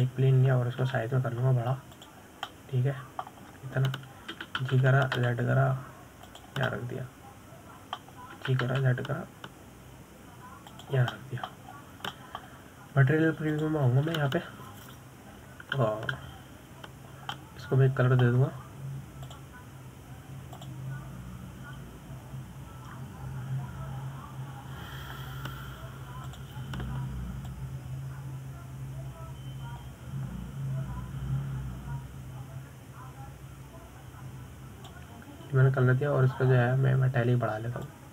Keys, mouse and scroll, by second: 0.4-1.4 shift+middle drag, 1.4 shift+a, 3.2 s, 4.7 scroll down 1, 4.9-5.8 middle drag, 5.8-6.7 scroll up 4, 6.7 g, 9.1-10.7 middle drag, 10.7 g, 13.5 middle click, 14.1-14.5 scroll down 2, 14.5-18.6 middle drag, 18.6 click, 19.7-21.6 middle drag, 21.6 click, 22.9-27.6 drag, 28.7 click.